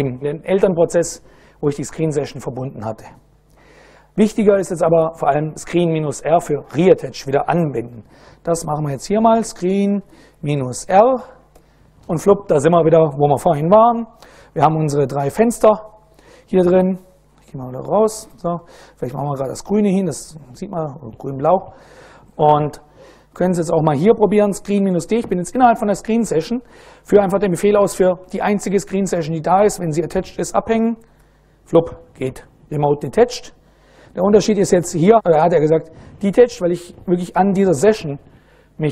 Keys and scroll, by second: 7.8 super+Right, 8.5-10.5 typing, 11.1 Return, 14.4 ctrl+a, 14.8 ctrl+shift+', 16.8 Escape, 18.6 ctrl+a, 19.1 2, 22.5-24.8 typing, 30.8 Return.